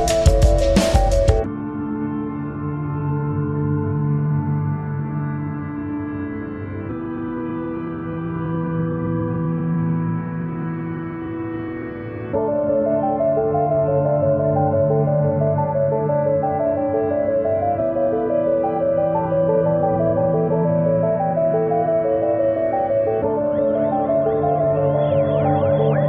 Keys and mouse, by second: 0.6 click, 0.6 typing, 0.9 ctrl+=, 1.3 ctrl+-, 1.9 ctrl+-, 2.5 space, 3.9 click, 5.1-6.1 typing, 6.1 ctrl+=, 7.2-7.6 typing, 7.5 click, 8.3 click, 9.5 click, 9.5 typing, 9.7-11.6 alt+drag, 11.7 alt+click, 14.9 click, 17.1 typing, 18.3 click, 18.3 typing, 19.3 click, 24.7 click, 24.7 click, 24.7 typing.